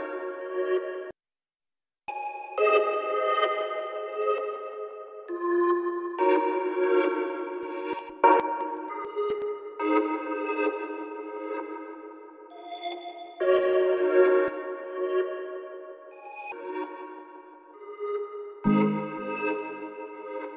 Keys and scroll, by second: 16.4 t.